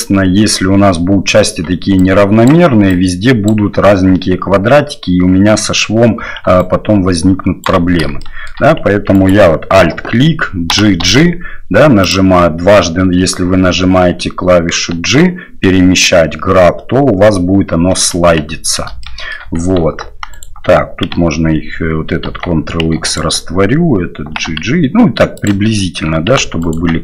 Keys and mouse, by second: 1.6-3.6 d, 1.9 click, 2.9 click, 6.4 d, 6.6-7.7 right drag, 7.6 d, 7.7 d, 8.2 shift+middle drag, 9.1 alt+right click, 10.7 g, 19.2 shift+middle click, 20.3 alt+right click, 22.2 ctrl+x, 23.0 alt+right click, 24.2 g, 26.6 alt+right click.